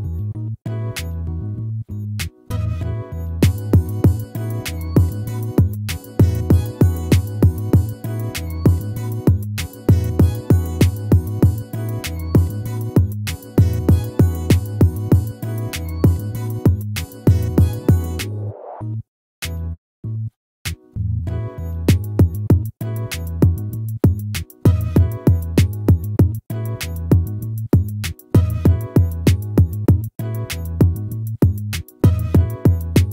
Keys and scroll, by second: 1.4 ctrl++, 5.0 ctrl+-, 7.8 ctrl+-, 9.2 ctrl++, 12.6 ctrl+-, 28.2 ctrl++.